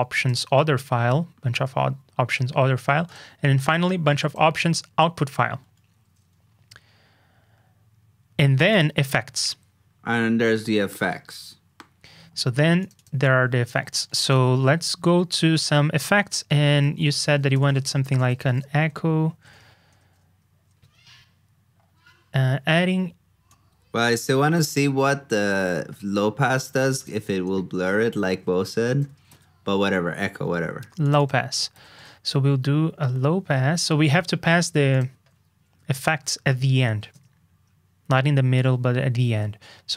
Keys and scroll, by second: 14.3 super+c, 16.8 super+f, 27.7 super+Up, 28.0 super+f, 31.7 super+c, 31.9 super+Tab, 35.9 super+v.